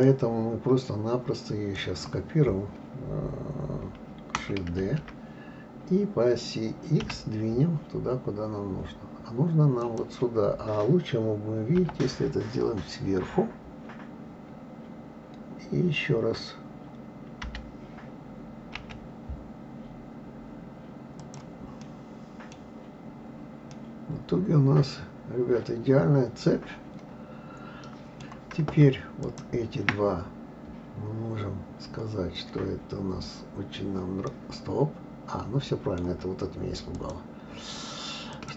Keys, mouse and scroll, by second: 0.0-3.0 middle drag, 4.8 shift+d, 11.8 KP_7, 12.8-13.2 scroll up 3, 17.4 g, 21.8-22.6 middle drag, 22.6-23.7 scroll down 5, 23.7-26.7 middle drag, 29.2 shift+click, 34.3-37.0 middle drag, 37.0 click, 38.3 click.